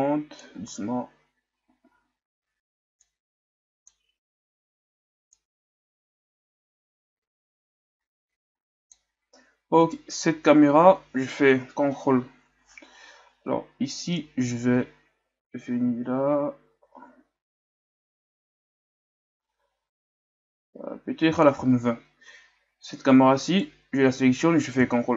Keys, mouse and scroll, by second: 0.0-0.5 drag, 0.5 alt+a, 1.9 alt+a, 3.2-8.6 drag, 10.0-12.9 right drag, 14.2-19.0 drag, 25.0 ctrl+KP_0.